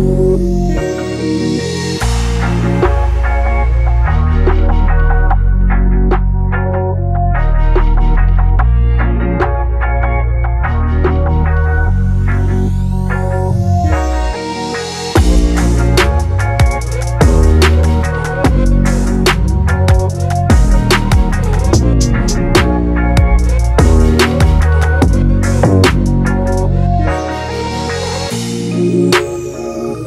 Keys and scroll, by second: 13.0 ctrl+g.